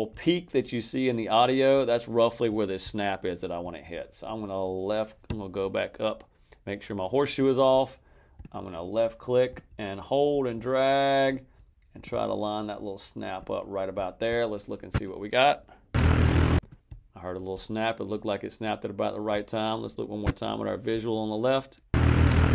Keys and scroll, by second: 15.8 space, 21.8 space.